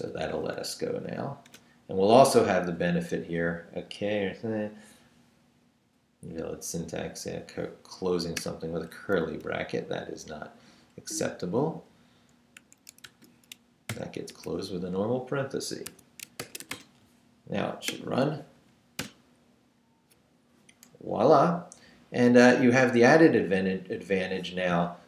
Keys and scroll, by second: 0.5 Up, 1.5 Return, 9.4 Right, 11.0 Right, 11.6 Down, 12.6 a, 13.0 BackSpace, 13.5 shift+BackSpace, 13.9 shift+0, 15.9 Escape, 16.2-17.1 typing, 18.5 Up, 19.0 Return.